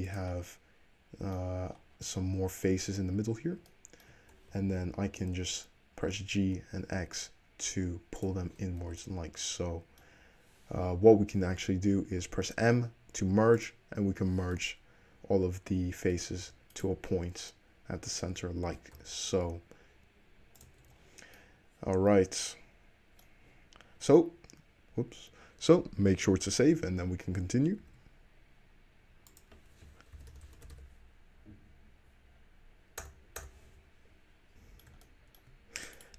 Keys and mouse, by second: 3.1 `, 3.9 shift+click, 4.0 shift+middle click, 4.0 shift+`, 4.6 alt+middle click, 4.7 alt+z, 6.2 g, 7.2-8.4 shift+middle drag, 8.8 alt+drag, 8.9 alt+z, 11.9 middle click, 12.3 m, 14.4 middle click, 14.9 middle click, 15.2-16.9 middle drag, 16.5 1, 16.9 click, 17.2 `, 18.2 click, 18.8 g, 19.6-20.9 shift+middle drag, 20.9 Tab, 22.9 middle click, 28.0 ctrl+s, 34.7-36.1 shift+middle drag, 36.1 click.